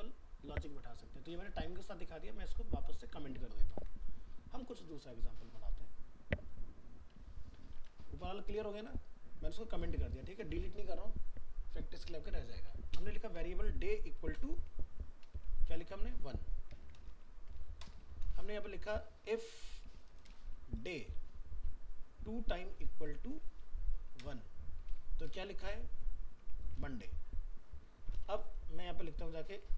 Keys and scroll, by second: 17.1 ctrl+s.